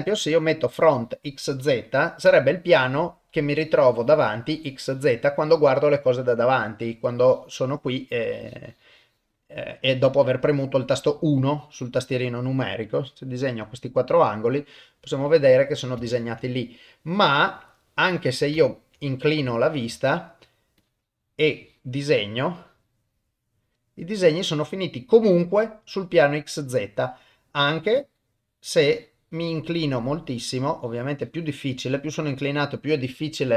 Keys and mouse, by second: 1.4 middle click, 2.3 KP_1, 8.3-9.3 drag, 9.8 click, 11.4 click, 12.8 click, 14.0-15.5 middle drag, 16.1 ctrl+middle click, 16.6-18.1 middle drag, 18.6 ctrl+middle click, 19.0 middle click, 19.5 shift+middle click, 19.9 ctrl+shift+middle click, 20.8-21.9 drag, 22.4-23.5 drag, 23.8-25.8 middle drag, 26.6 middle click, 27.8-29.4 drag, 30.0-31.4 drag, 31.6-33.5 middle drag.